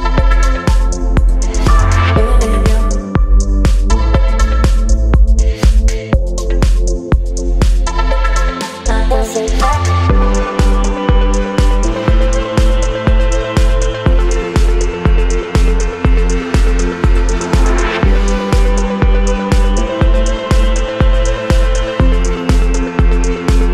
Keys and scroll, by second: 1.3 Delete, 2.6 x, 2.9 Delete, 3.7 space, 6.2 v, 10.5 KP_6, 12.0 Return, 22.6 Return.